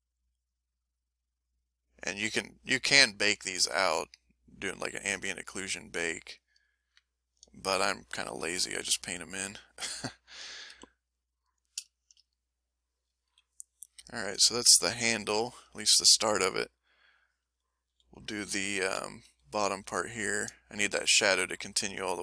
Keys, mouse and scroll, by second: 0.6 middle click, 1.3-3.7 drag, 3.8 middle click, 4.4 click, 5.6 middle click, 6.1 click, 6.8 ctrl+middle click, 7.5 ctrl+click, 8.4 ctrl+middle click, 9.0-10.2 ctrl+middle drag, 10.7 a, 11.1 middle click, 11.9 shift+click, 12.5 shift+middle click, 13.3 shift+m, 13.4-15.8 shift+middle drag, 16.3 ctrl+middle click, 17.9 l, 19.0 m, 19.3 l, 19.8 l, 20.5 middle click, 21.9 middle click.